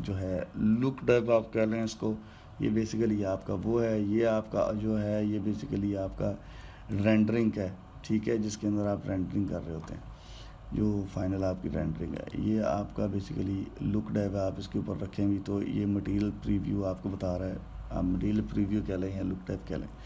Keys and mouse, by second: 2.9 click, 7.9 click, 9.7-12.8 middle drag, 13.0 click.